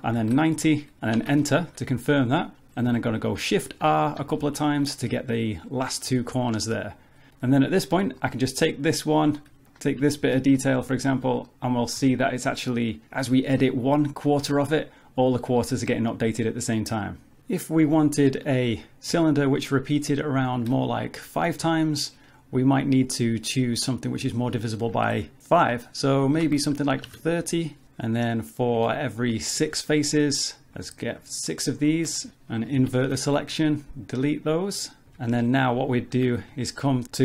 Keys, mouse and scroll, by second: 3.8 shift+r, 4.2 shift+r, 5.0 middle click, 6.1 z, 6.5-7.3 scroll down 2, 6.7 middle click, 7.3 alt+z, 7.3 middle click, 7.5 click, 8.0 Tab, 8.2 middle click, 8.9 scroll up 2, 10.0 click, 10.1 shift+click, 10.5 middle click, 11.3 scroll down 3, 11.5 middle click, 12.0 s, 16.4 middle click, 17.9 Tab, 18.5 click, 19.1 x, 20.6 shift+a, 23.7 click, 27.8 middle click, 28.8 Tab, 29.3 click, 30.7 shift+click, 31.1 click, 31.5 shift+click, 31.9 shift+click, 32.2 middle click, 32.3 shift+click, 32.8 ctrl+i, 33.3 x, 35.3 Tab, 35.4 middle click, 36.5 z.